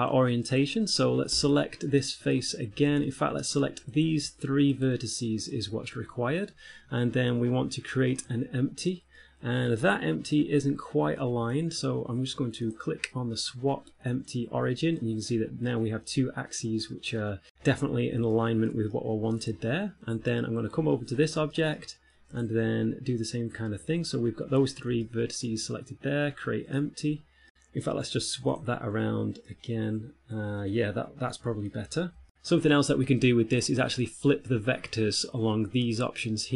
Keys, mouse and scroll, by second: 0.8 right click, 1.6 Tab, 2.3 middle click, 3.2 ctrl+Tab, 4.2 right click, 5.0 shift+right click, 6.3 right click, 6.8-7.9 scroll up 7, 8.4 click, 9.4 middle click, 13.0 click, 14.6 middle click, 17.2 middle click, 18.6 shift+middle click, 19.1 shift+middle click, 20.5 Tab, 21.0 right click, 21.4-21.8 scroll up 3, 21.8 shift+middle click, 22.0 middle click, 22.6 Tab, 23.8-24.6 scroll up 1, 25.4 shift+middle click, 27.0 click, 28.8 click, 29.8 middle click, 32.3 shift+middle click, 32.3-34.6 scroll down 1.